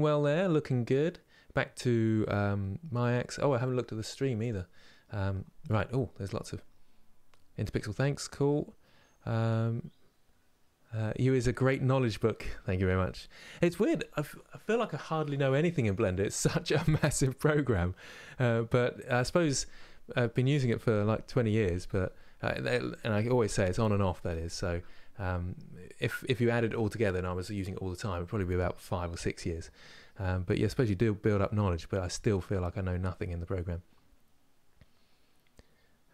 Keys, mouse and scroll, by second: 0.0-36.1 shift+middle drag.